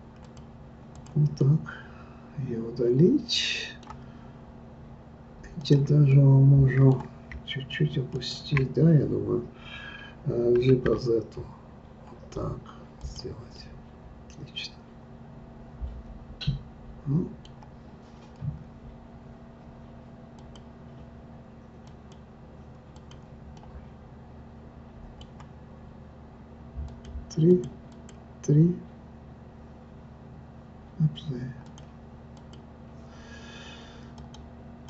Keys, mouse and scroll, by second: 0.9 click, 1.4-4.4 middle drag, 5.6 click, 6.1-8.1 middle drag, 8.1 shift+click, 10.6 g, 13.5-16.5 middle drag, 20.4-23.1 drag, 23.5-26.6 middle drag, 26.9 click, 27.5 click, 31.6 click, 34.1 click.